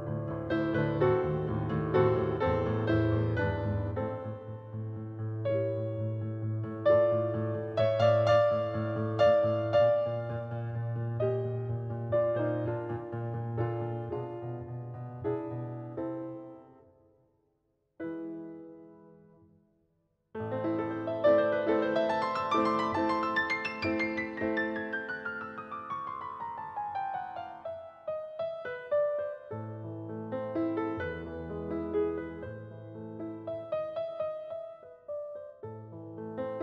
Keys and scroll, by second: 9.7 space, 30.2 space.